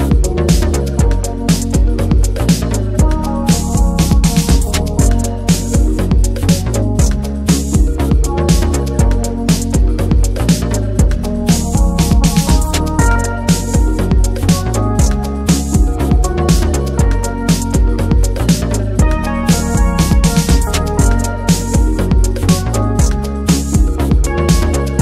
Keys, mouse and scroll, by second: 0.1 shift+middle click, 0.5-1.1 scroll up 1, 1.1 ctrl+b, 4.9 scroll down 1, 5.1 Tab, 5.2 drag, 5.4-5.9 middle drag, 5.9 drag, 6.1 scroll down 1, 6.4 click, 6.8 scroll down 1, 7.0 middle drag, 7.2 click, 7.4-8.1 middle drag, 8.1 drag, 8.3 click, 8.6 alt+middle click, 9.2 alt+middle click, 9.6 click, 10.2-10.7 middle drag, 10.7-11.8 right drag, 11.8 middle click, 11.9-12.7 scroll up 1, 12.7 click, 13.0 middle click, 13.6 click, 14.5 middle click, 14.7 scroll up 1, 14.8-15.5 middle drag, 15.5 click, 16.0 scroll down 3, 16.2 click, 16.4-17.1 middle drag, 17.1 click, 17.3-18.0 middle drag, 18.0 drag, 18.2 middle drag, 18.6-19.2 middle drag, 19.2 Tab, 19.4 a, 20.2 scroll up 1, 20.3 middle click, 20.7 click, 21.7 l, 21.9 p, 22.5 Tab, 22.6 click, 22.8 click, 23.0 middle drag, 23.3-24.0 scroll up 3, 23.5 middle click, 24.0 middle drag, 24.3 scroll down 1, 24.4 shift+middle click.